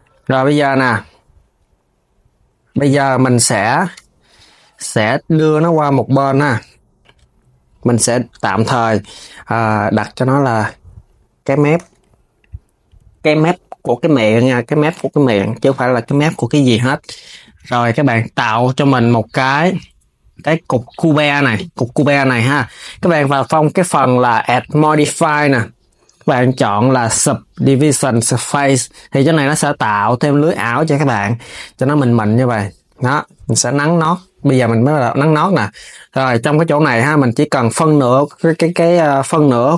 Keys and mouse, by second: 3.6 KP_7, 5.5 click, 6.1 KP_7, 6.9 Tab, 8.2 Tab, 10.2 click, 10.3-12.2 drag, 15.2 s, 15.4 KP_3, 17.2 shift+a, 22.7 click, 23.6 click, 24.2-27.3 drag, 31.6-33.0 drag, 34.8 Tab.